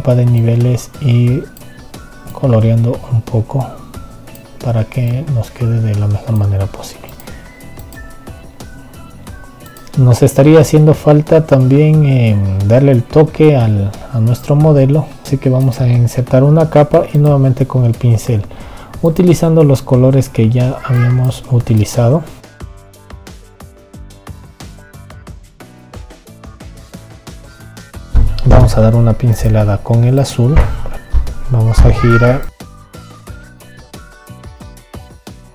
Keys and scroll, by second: 31.5 ctrl+z.